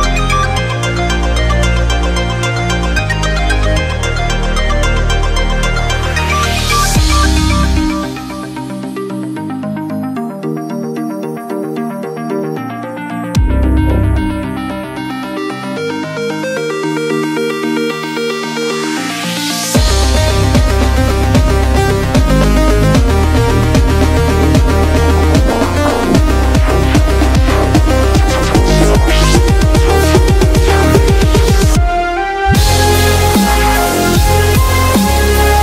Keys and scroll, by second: 8.3 Return.